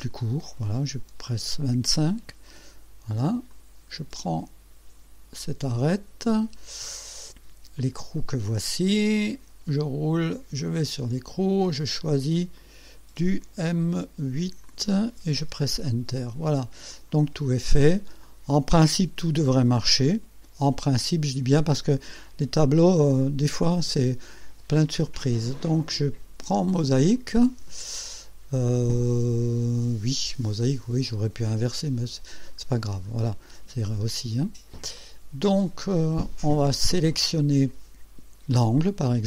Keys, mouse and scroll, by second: 0.5 click, 2.0 Return, 2.5-3.5 drag, 3.6 click, 5.5 click, 7.8 click, 9.6-9.9 scroll down 1, 10.7 click, 12.1 click, 12.6 click, 14.7 click, 15.4 Return, 17.0 click, 17.6-18.0 scroll down 1, 18.3 click, 19.3 ctrl+s, 20.0 right click, 22.2 click, 25.4 click, 26.6 click, 32.1-32.7 scroll down 2, 32.9 scroll up 1, 35.0-36.9 drag, 38.6 click.